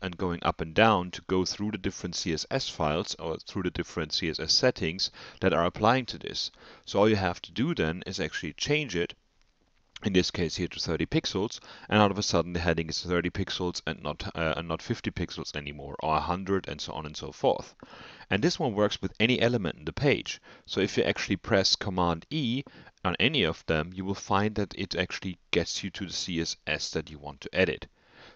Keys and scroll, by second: 0.6 alt+Up, 1.3 alt+Down, 2.2 alt+Up, 3.1 alt+Down, 4.6 alt+Up, 5.5 alt+Down, 6.8 Down, 7.5 Right, 7.9 Up, 8.1 Right, 20.6 super+e, 27.4 super+e.